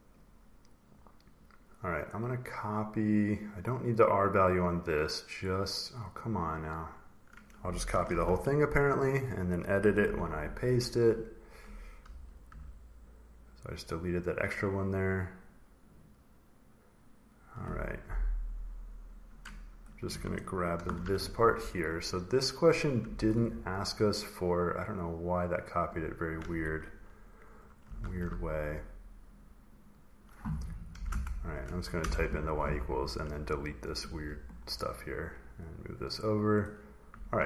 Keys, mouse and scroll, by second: 0.7 click, 1.2 click, 3.3 click, 3.7 click, 3.9 click, 4.6 click, 6.0 click, 6.4 click, 6.7 click, 8.0 ctrl+c, 8.0 click, 9.0 click, 9.9 ctrl+v, 11.1 click, 12.4 Delete, 13.5 click, 14.3 click, 14.7 click, 14.9 click, 15.8 click, 16.0 click, 19.6 click, 20.6 ctrl+c, 21.2 click, 22.5 click, 22.9 Escape, 23.5 click, 24.1 click, 25.5 click, 27.5 click, 27.9 ctrl+v, 29.2 click, 29.6 click, 29.8 click, 30.8 y, 32.8 y, 33.1 click, 34.3 Delete, 34.8 click, 36.4 click.